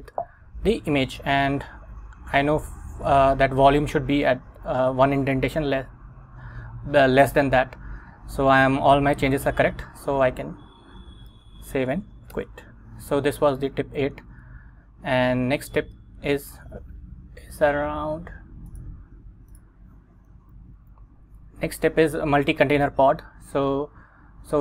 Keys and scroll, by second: 0.2 Up, 0.7 Up, 1.4 Down, 11.4 shift+;, 11.8 x, 12.4 Return, 14.6 super+Tab, 15.9 Return, 20.9 Right.